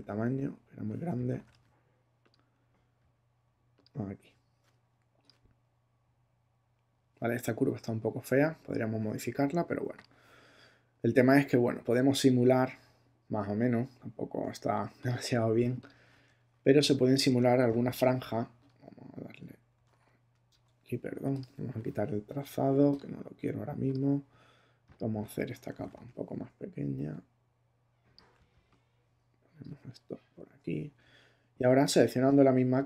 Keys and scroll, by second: 0.0 <, 1.3 shift+<, 16.7 super+t, 17.9 super+↻, 19.7 super+t, 25.7 super+t, 26.4 shift+super+t, 30.4 Return.